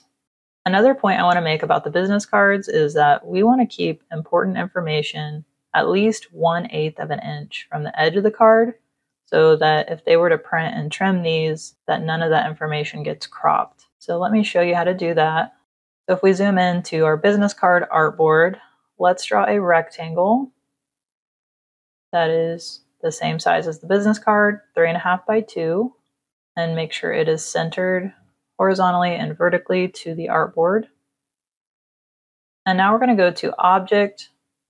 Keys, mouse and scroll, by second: 2.5 click, 8.9 space, 9.0 click, 10.0 click, 13.4 space, 13.7 click, 15.1 click, 15.6 v, 16.1 click, 17.0 v, 17.3 space, 17.4 click, 19.1 click, 21.0 click, 25.7 click, 26.4 click, 27.1 click, 28.0 click, 28.7 click, 31.2 click, 33.3 click.